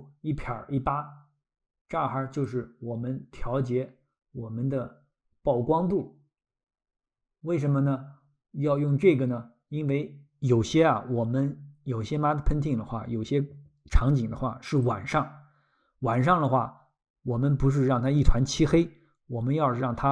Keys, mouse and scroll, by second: 2.5 click.